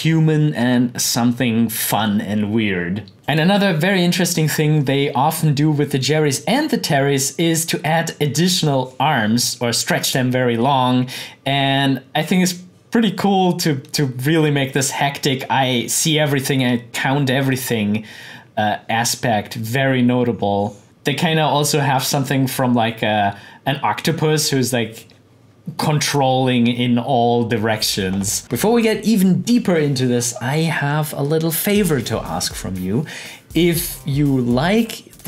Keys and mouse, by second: 3.1 click, 20.8 click.